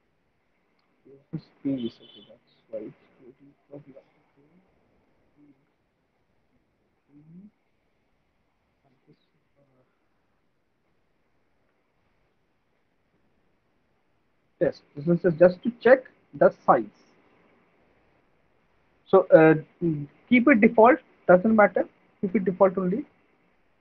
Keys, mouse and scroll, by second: 0.7 click, 3.0 middle click, 3.6 middle click, 5.2 click, 5.4 click, 6.8 click, 7.0 click, 9.3 click, 11.5 typing, 12.8 typing, 16.1 click.